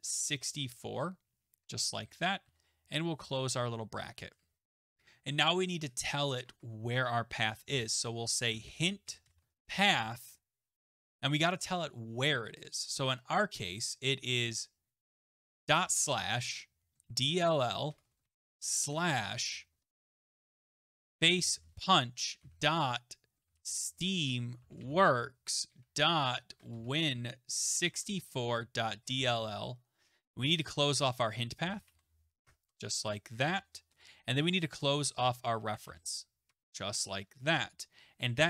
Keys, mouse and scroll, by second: 0.0-0.8 typing, 1.5 Right, 2.4 shift+., 3.5 Return, 6.4 Tab, 7.7-11.5 typing, 15.7 typing, 16.8-19.3 typing, 20.6-37.9 typing, 32.5 Tab, 36.5 Tab.